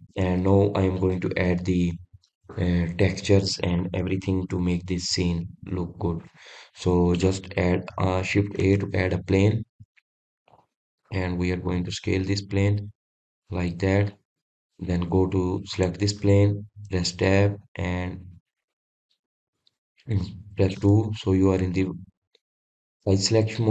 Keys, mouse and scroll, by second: 0.5 scroll down 1, 1.1 scroll up 2, 7.6-8.0 scroll up 1, 8.0-8.4 scroll down 2, 8.4-8.8 scroll up 2, 8.8-10.3 scroll down 1, 10.3 shift+a, 15.7 drag, 16.0-17.4 middle drag, 17.4 click, 18.6 Tab, 19.2 click, 19.9 click, 20.4 click, 21.1 click, 22.4 2, 23.5 click.